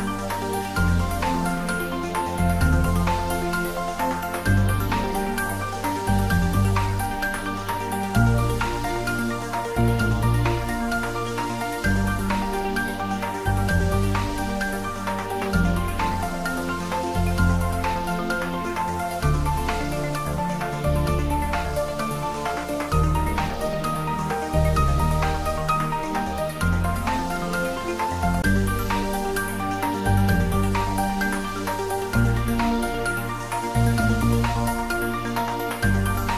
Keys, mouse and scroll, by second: 1.9 z, 4.4 shift+z, 5.5 shift+z, 6.6 shift+z, 7.6 click, 8.6 scroll up 1, 13.1 scroll up 1, 13.3 shift+z, 14.3 shift+z, 16.2 ctrl+z, 17.6 shift+z, 18.7 click, 19.7 scroll down 1, 20.5-22.3 middle drag, 22.3-22.6 scroll up 1, 24.0 click, 25.0 shift+click, 26.6 click, 29.7 shift+click, 30.7 s, 31.9 click, 35.6 scroll up 1, 36.0 shift+z.